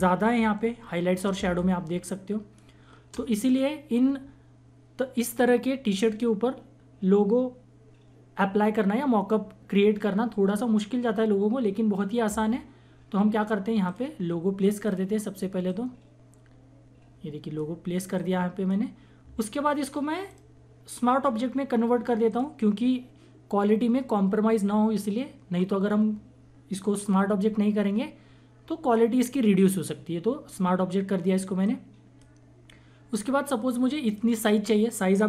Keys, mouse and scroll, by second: 1.3 space, 1.6 click, 1.8 space, 13.8-20.3 drag, 20.3 right click, 22.3 click, 28.9-31.6 drag, 28.9 typing, 31.6-35.2 drag, 31.6-32.4 typing, 33.4 typing.